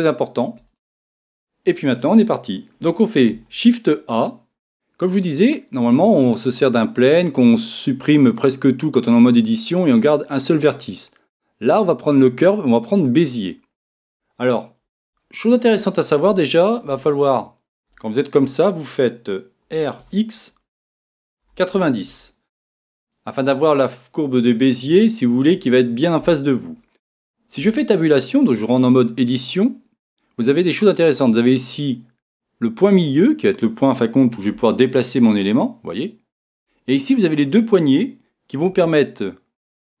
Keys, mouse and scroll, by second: 3.4 shift+a, 15.2-22.1 middle drag, 19.7 r, 27.6 Tab, 28.4-34.5 middle drag, 34.5 g, 36.5 click, 38.0-40.0 right drag, 38.7 g.